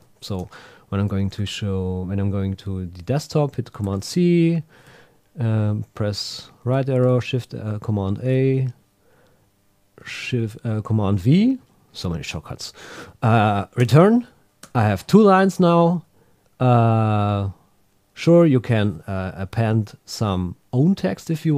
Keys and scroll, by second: 3.8 super+c, 4.9 Right, 6.9 shift+super+a, 8.2 super+v, 13.8 Return, 16.8 Down, 18.4 super+w.